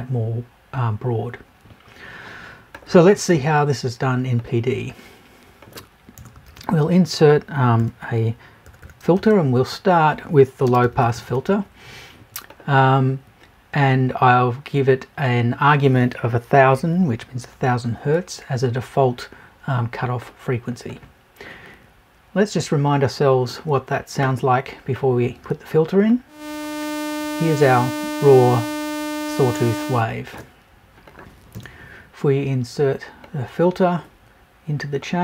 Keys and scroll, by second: 6.1 BackSpace, 31.5 BackSpace.